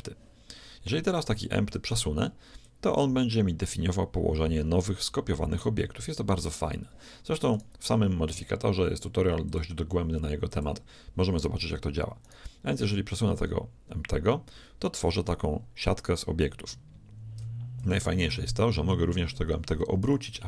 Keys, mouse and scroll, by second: 1.2-3.1 right drag, 2.7-4.5 drag, 8.4-9.5 right drag, 9.5-12.5 drag, 12.3 right click, 13.2-15.0 drag, 20.1 r.